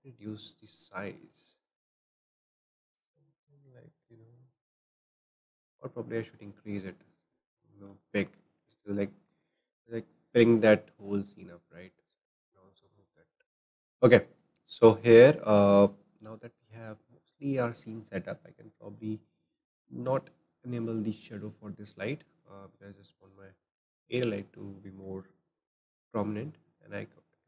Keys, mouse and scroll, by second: 0.6-3.9 right drag, 7.7-8.3 scroll down 2, 8.0-10.3 shift+middle drag, 10.3-12.5 drag, 14.0 click, 14.4 middle click, 15.0-15.3 scroll up 2, 15.3-22.0 shift+middle drag, 22.0 click, 24.9-26.2 shift+middle drag, 26.1 click, 26.4-26.7 scroll up 3.